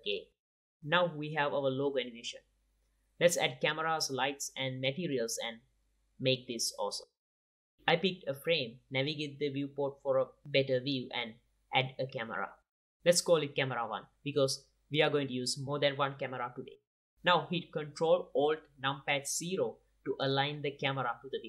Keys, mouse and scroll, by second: 5.0 ctrl+s, 5.3-6.5 drag, 6.5-6.9 middle drag, 7.4 middle click, 7.8-8.2 drag, 10.1 middle drag, 10.3 click, 10.5 middle drag, 10.7 click, 10.9 middle click, 11.6-12.1 drag, 11.7 shift+a, 15.9 F2, 20.7 ctrl+alt+KP_0.